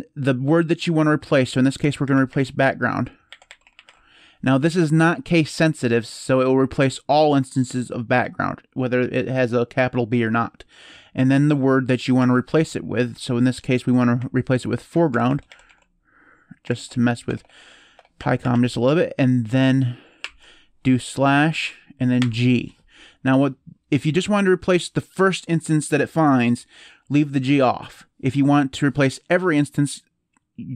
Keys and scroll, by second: 1.3-4.1 typing, 12.0 /, 13.5-18.8 typing, 20.0 typing, 22.0 typing.